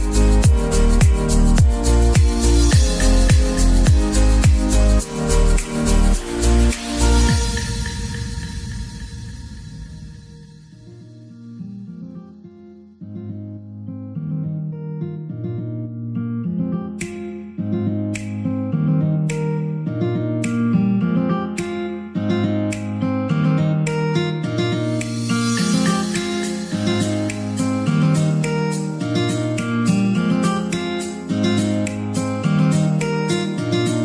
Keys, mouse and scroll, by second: 0.0 double click, 0.9 r, 1.3 x, 1.6 9, 1.7 KP_0, 1.9 Return, 2.6-2.9 scroll up 3, 2.9-4.3 shift+middle drag, 4.3 g, 4.5 y, 5.4 click, 5.8 scroll up 2, 6.0-7.1 middle drag, 7.1 s, 7.9 click, 8.1-13.0 middle drag, 9.3-10.8 scroll up 7, 10.8 1, 11.5-12.2 scroll up 2, 12.2-13.0 scroll down 2, 13.0 s, 15.9 click, 17.4 s, 18.2 click, 18.7-19.7 middle drag, 19.7 g, 20.4 z, 21.1 right click, 21.9 g, 22.2 z, 22.6 click, 22.9 scroll up 1, 23.1 middle click, 23.5 g, 25.3 click, 25.5-25.8 scroll up 2, 25.8-28.1 shift+middle drag, 28.1 click, 28.8-30.2 middle drag, 30.2 t, 30.4-32.9 middle drag, 32.9 Tab, 33.4-34.0 middle drag.